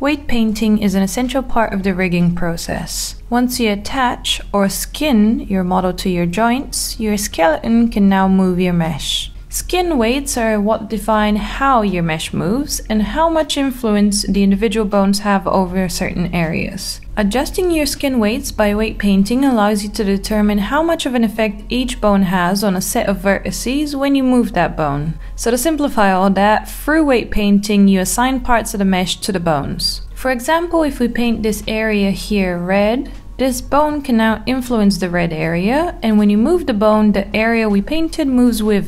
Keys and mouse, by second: 2.0 ctrl+p, 7.0 Tab, 8.7 g, 12.0 Tab, 18.6 click, 19.8 click, 21.2 click, 22.1 click, 22.7 r, 23.8 click, 24.1-24.6 middle drag, 24.8 shift+middle drag, 25.6 Tab, 27.4 middle click, 27.5 click, 28.3 click, 28.9 click, 29.1 click, 29.3 middle click, 29.7 click, 29.9 middle click, 30.4 Tab, 33.4 middle click, 33.9 click, 35.0 middle click.